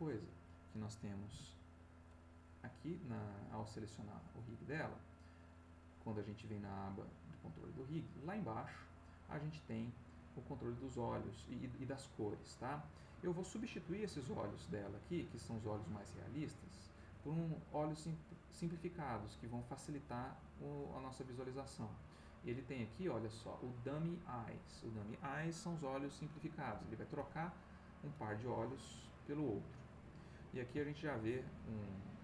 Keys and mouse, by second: 1.3 n, 4.0 click, 5.8 click, 7.7 middle click, 8.5 click, 9.4 click, 9.9 click, 11.6-12.7 drag, 12.8 click, 14.9 click, 16.0 middle click, 16.6 middle click, 20.7 middle click, 24.6 click, 26.7 1, 27.1 Return, 31.0-32.2 ctrl+drag.